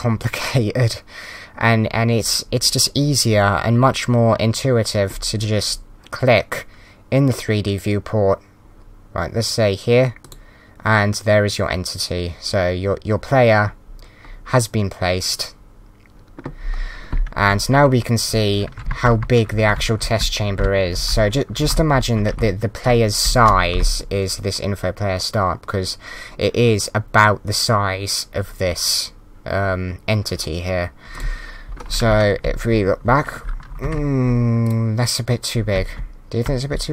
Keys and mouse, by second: 10.2 click, 18.3-22.3 typing, 19.5 Left, 19.6 Up, 21.0 Left, 23.7 Down, 31.1 click, 31.8-32.6 typing, 33.0 Right, 33.8 Right, 34.6 click, 35.4-36.2 typing.